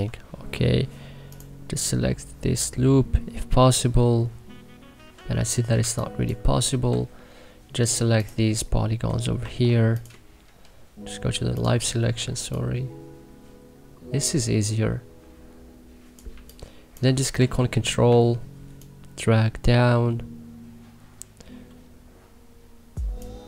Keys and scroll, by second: 0.0-0.3 typing, 5.7 1, 6.8 c, 9.3 e, 16.3 3, 17.3 e, 23.3 ctrl+z.